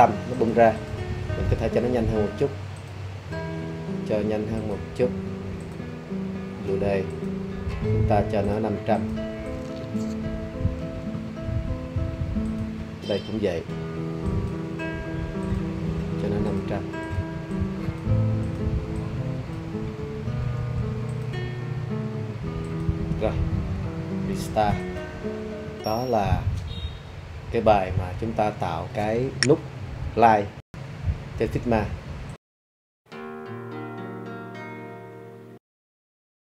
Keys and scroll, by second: 10.8 5, 20.6 5.